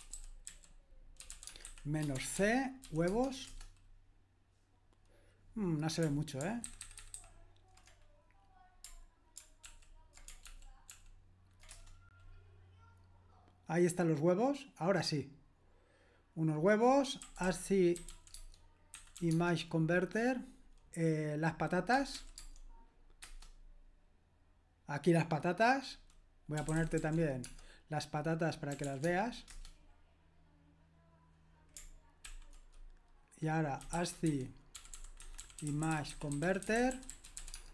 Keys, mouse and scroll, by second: 0.0-3.5 typing, 6.6 ctrl+alt+-, 6.8 ctrl+alt+-, 7.0 ctrl+alt+-, 7.1 ctrl+alt+-, 10.4 ctrl+alt+p, 17.0-19.6 typing, 21.7-23.2 typing, 26.3-29.3 typing, 29.5 Return, 32.2 ctrl+l, 33.6-37.7 typing.